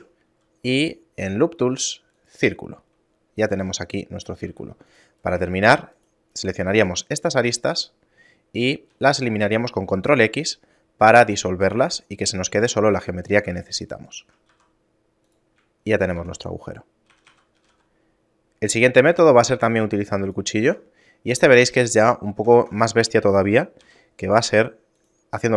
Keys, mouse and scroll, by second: 0.3 w, 3.5 a, 4.5 ctrl+Tab, 5.2 right click, 5.6 shift+right click, 5.9 shift+right click, 6.8 shift+middle click, 8.9 ctrl+x, 11.3 shift+middle click, 11.9 scroll up 1, 12.5 ctrl+Tab, 13.3 right click, 13.6 shift+right click, 13.9 shift+right click, 14.5 e, 15.8 shift+middle click, 16.2 Tab, 16.5 scroll down 2, 17.1 a, 17.3 a, 17.6 g, 19.6 shift+a, 20.7 Tab, 21.3 Tab, 21.9 shift+middle click, 22.7 Tab, 23.9 k.